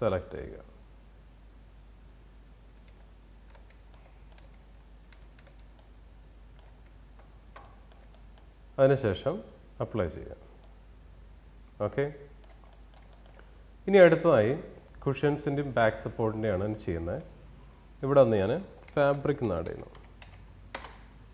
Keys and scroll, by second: 20.2 Return.